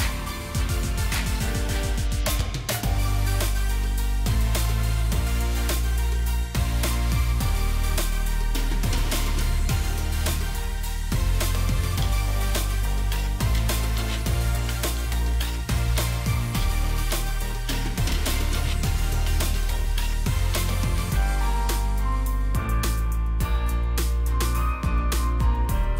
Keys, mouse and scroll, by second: 1.8 double click, 3.0-3.6 scroll up 1, 3.6-6.7 scroll down 1, 23.1-23.9 scroll up 1, 25.7-25.9 scroll up 1.